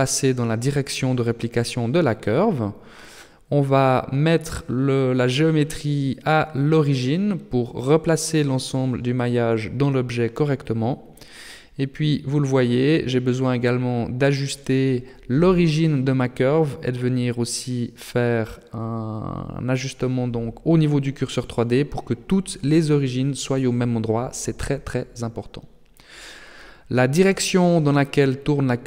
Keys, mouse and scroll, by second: 0.9 middle click, 4.8 click, 11.1 right click, 11.9 middle click, 13.5 shift+middle click, 16.6 click, 23.0 right click, 25.2 right click, 25.5 Tab, 26.7 a, 27.0 a.